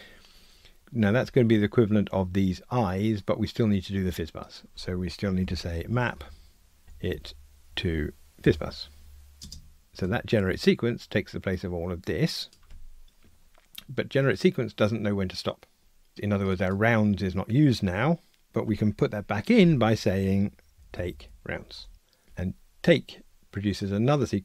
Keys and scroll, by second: 8.5 Return, 9.9 Escape, 21.4 Return.